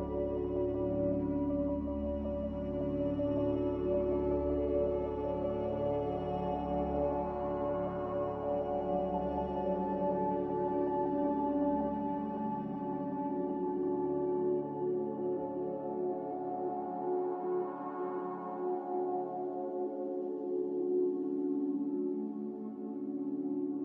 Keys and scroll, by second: 2.0 ctrl+c, 5.0 ctrl+v, 16.4 a, 17.8 ctrl+c, 21.7 ctrl+c.